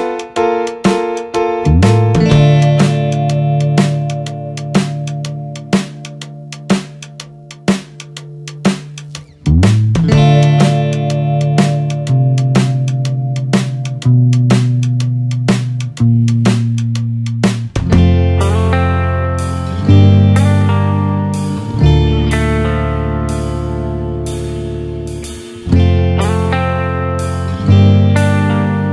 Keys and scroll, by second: 15.1 ctrl+d, 17.8 ctrl+0, 18.2 ctrl+=.